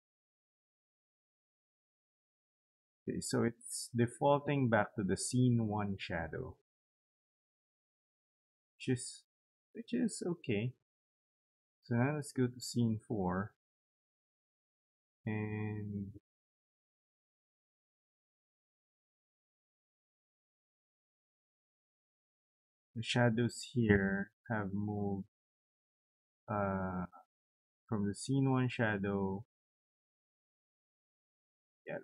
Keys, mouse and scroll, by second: 0.1 click, 0.4 click, 11.1 click, 11.3 click, 22.2 click.